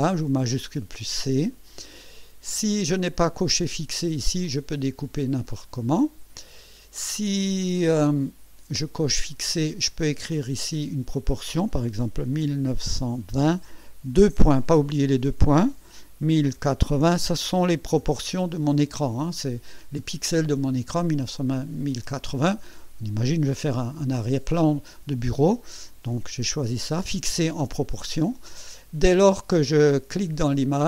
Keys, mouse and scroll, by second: 0.6 click, 3.4 click, 4.4-6.6 drag, 7.6 click, 9.3 click, 10.4 click, 12.3 KP_1, 12.7 KP_9, 13.0 KP_2, 13.3 KP_0, 16.2 KP_1, 16.5 KP_0, 17.1 KP_8, 18.0 KP_0, 30.6-30.8 drag.